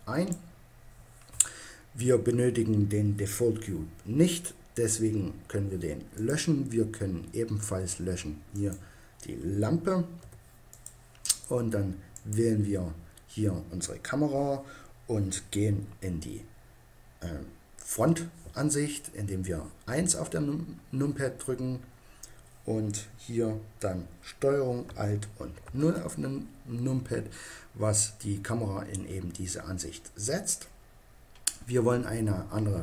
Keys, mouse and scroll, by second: 5.4 Delete, 8.6-10.5 right drag, 10.2 Delete, 12.2-14.0 right drag, 20.0 KP_1.